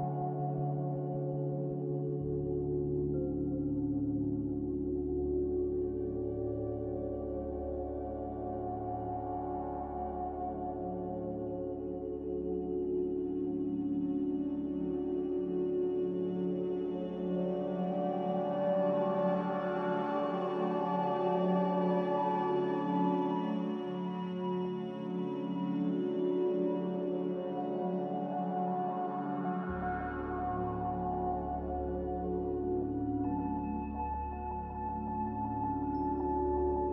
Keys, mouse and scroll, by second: 14.5 a, 26.4-30.1 typing, 31.8-32.6 typing, 36.6-36.9 typing.